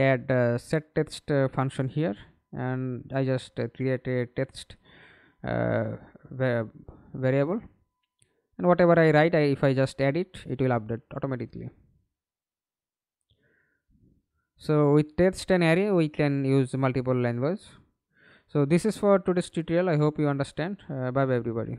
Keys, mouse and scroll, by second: 1.9-3.8 typing, 13.4 Delete, 14.5 Delete, 16.8 scroll down 1, 21.3 alt+F9.